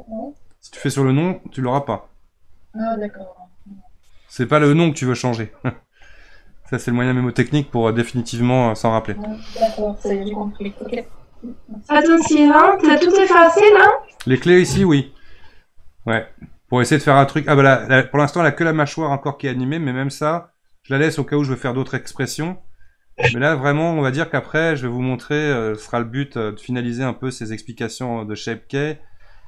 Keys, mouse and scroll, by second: 1.6 right click, 4.5-7.2 right drag, 16.2-19.4 drag.